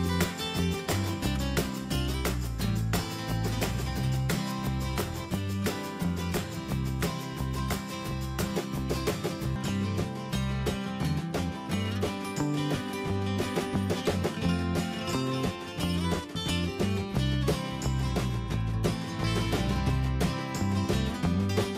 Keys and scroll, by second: 3.7 Down, 9.1 Up, 9.8 Return, 20.4 ctrl+c.